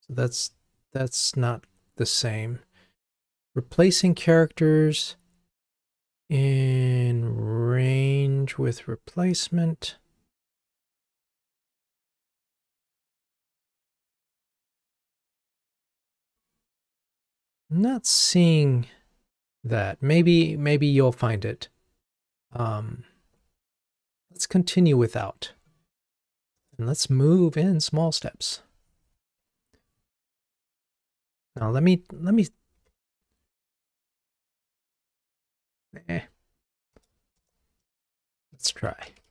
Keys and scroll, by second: 22.7 ctrl+Tab, 32.8 super+z.